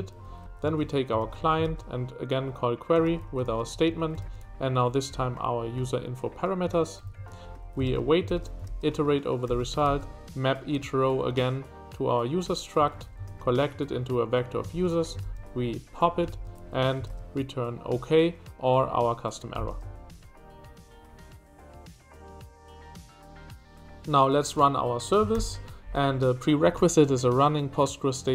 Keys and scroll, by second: 0.0-1.2 typing, 2.8-5.6 typing, 6.6-7.9 typing, 9.4 shift+v, 12.8 Escape, 12.8-14.7 typing, 16.3 shift+v, 17.0 shift+v, 19.7 shift+v, 25.3 ctrl+y.